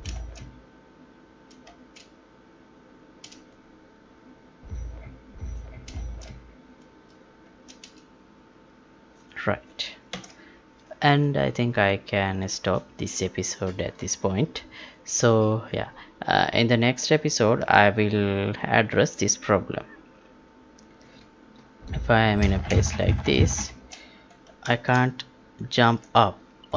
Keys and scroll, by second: 1.6 space, 5.9 space, 7.4 space, 10.1 ctrl+p, 23.6 space, 24.7 space.